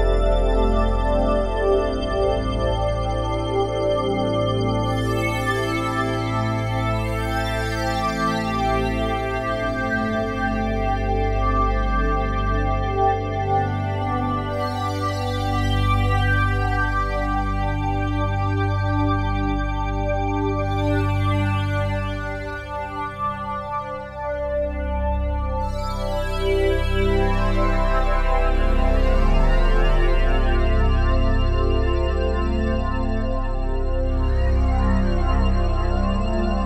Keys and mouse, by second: 2.7 click, 3.4 click, 4.1 click, 4.8 click, 6.0 click, 7.1 click, 7.9 click, 9.9 click, 12.8 g, 13.2 x, 16.7 shift+click, 18.2 click, 20.7 click, 21.6 click, 22.8 click, 25.0 click, 27.7-28.4 typing, 28.4 Return, 29.4 click, 29.8 click, 30.8-31.9 typing, 31.3 Return, 31.9 click, 33.3-33.8 typing, 34.4 click, 35.2 click.